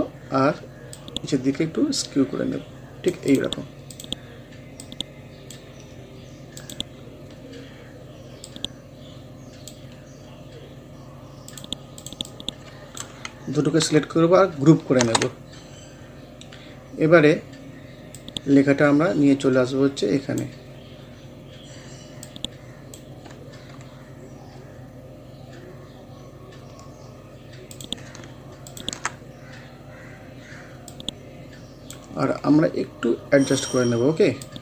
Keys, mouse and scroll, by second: 5.9 scroll down 1, 6.6 click, 7.4 scroll up 1, 8.5-9.9 drag, 9.9-10.3 scroll down 1, 11.5-15.0 drag, 15.0 ctrl+g, 15.3 scroll down 1, 16.9 scroll up 1, 18.2-21.0 drag, 21.0 scroll up 1, 22.3-24.3 drag, 24.3 scroll down 1, 26.5 scroll up 1, 27.8-34.6 drag.